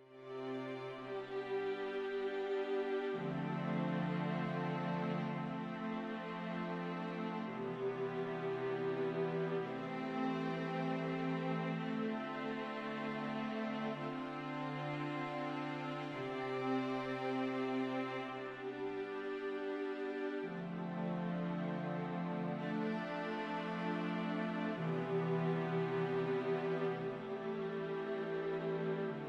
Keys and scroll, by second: 0.8 super+c, 1.7 super+f, 2.7 shift+Right, 24.7 v, 28.0 shift+Left.